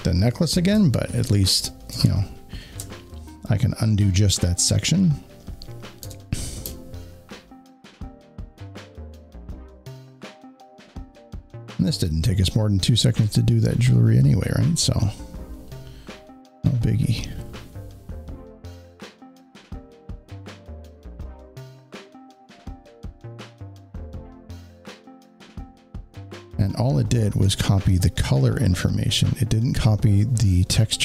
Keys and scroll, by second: 1.9 space, 2.0 space, 2.1 space, 5.9 w.